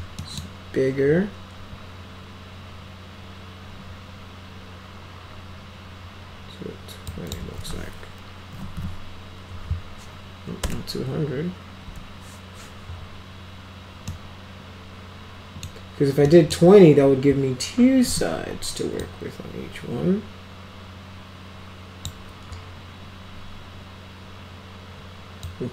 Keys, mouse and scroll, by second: 0.2 middle click, 7.1 click, 8.3-9.3 typing, 10.7 BackSpace, 11.9 Return, 14.1-15.7 middle drag, 16.3 middle click, 18.4 w, 19.0-22.1 drag, 25.5-25.7 drag.